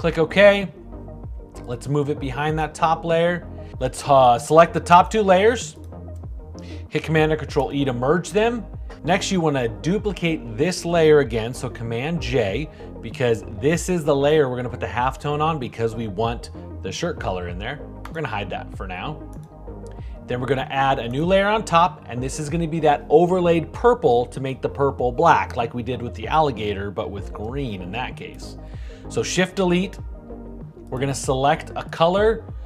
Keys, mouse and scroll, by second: 7.0 super+e, 11.4 super+j, 28.8 shift+Delete.